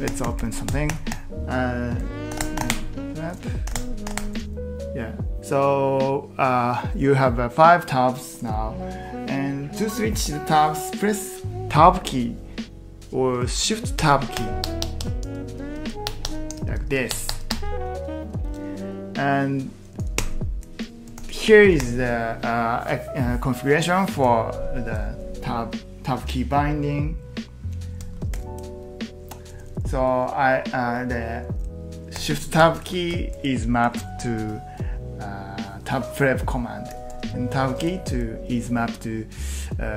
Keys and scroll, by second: 0.9 typing, 2.1-4.6 typing, 14.0 Tab, 14.3 Tab, 14.6 Tab, 14.8 Tab, 19.9-22.3 typing, 28.1 Escape, 28.3 typing, 29.4-30.2 typing, 32.0-33.7 typing, 35.7-37.7 typing.